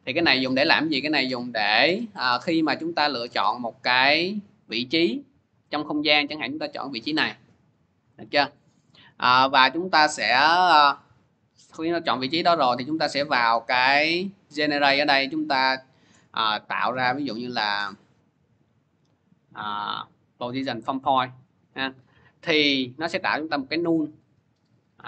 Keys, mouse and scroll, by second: 0.2 click, 2.9 click, 7.0 click, 14.5-19.6 drag, 20.3 click, 22.1-22.7 scroll, 24.0 click.